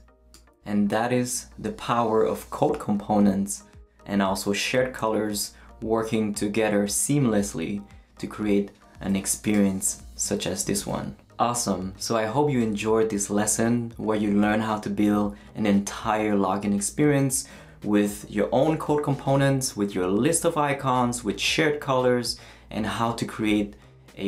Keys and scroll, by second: 9.9 super+z.